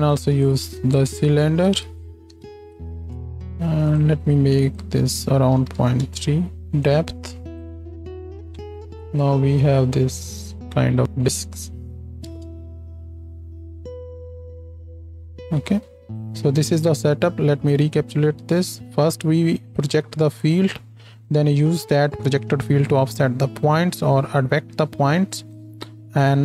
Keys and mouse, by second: 4.0 click, 12.7 ctrl+space, 16.1-17.8 drag.